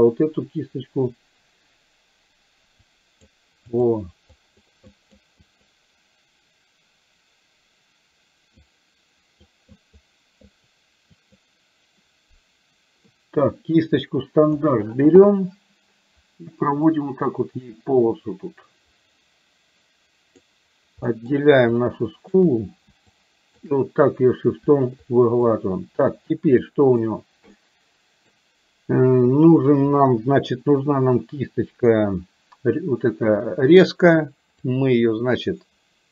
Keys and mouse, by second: 2.9 click, 4.4 click, 4.9 click, 5.5 click, 8.8 click, 9.8 click, 10.5 click, 11.3 click, 14.5 click, 16.9-20.4 drag, 21.1 middle click, 21.8 shift+click, 23.3 shift+click, 25.0 shift+click, 26.8 middle click, 27.5 middle click, 32.0 click, 34.8-36.1 drag.